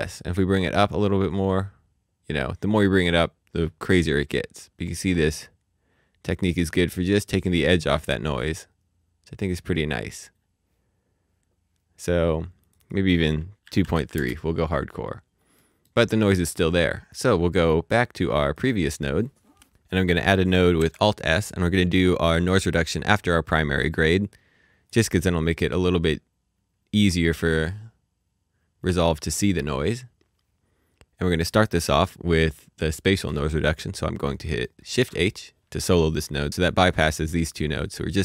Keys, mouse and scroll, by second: 0.9 space, 1.3 click, 10.0-11.4 scroll, 12.6 click, 13.6 KP_2, 13.7 KP_Decimal, 13.9 KP_3, 14.1 KP_Enter, 15.0-15.6 scroll up 1, 15.6 middle click, 16.5 click, 21.5 click, 25.4-26.6 scroll up 1, 28.8 scroll up 1, 28.9 click, 31.4 click, 33.8-34.2 scroll down 1, 34.2 middle click, 36.6 click.